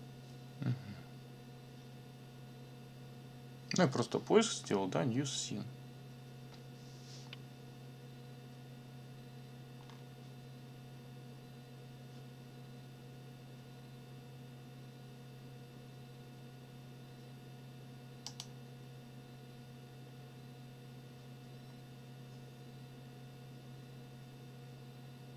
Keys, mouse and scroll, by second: 9.8-10.1 scroll down 2, 18.3 click.